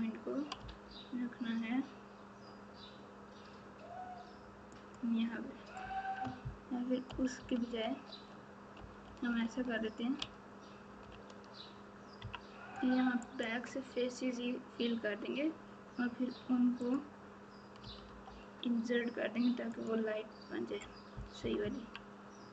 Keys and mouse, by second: 7.0-11.4 ctrl+z, 12.2 KP_3, 17.8 g, 21.3 KP_6, 21.6 KP_6.